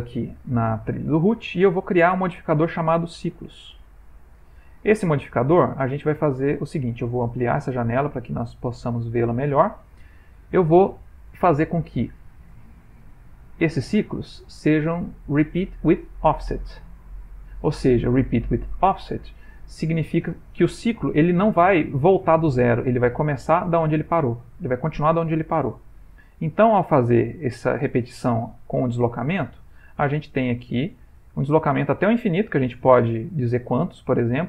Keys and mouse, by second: 1.0 middle click, 2.2 click, 4.5 ctrl+middle click, 5.3 ctrl+middle click, 5.7 middle click.